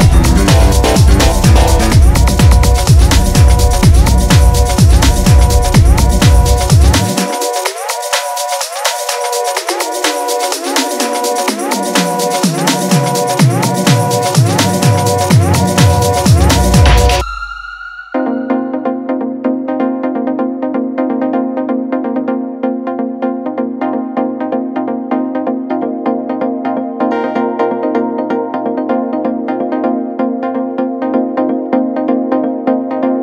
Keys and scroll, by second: 15.9 3, 16.9 ], 18.7 [, 20.3 ], 21.8 ], 29.4 ctrl+z.